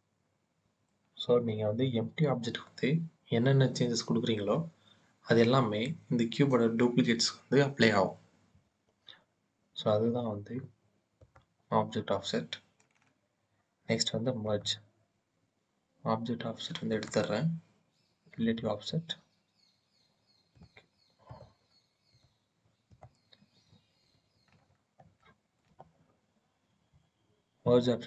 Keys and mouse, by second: 11.0 click, 14.2 click, 16.7 click, 18.2 click, 20.2 click, 21.1 click, 21.8 click, 22.7 click, 23.9 KP_1, 25.1-25.4 shift+drag, 27.5-28.0 drag.